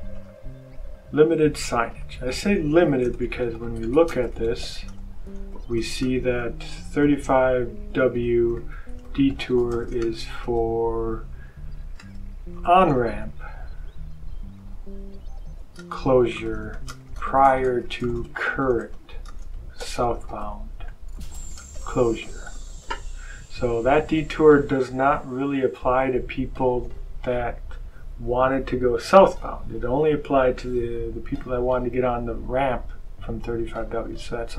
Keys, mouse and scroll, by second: 0.1 click, 1.5 click, 2.5-10.8 typing, 11.9-23.1 typing, 25.1 click.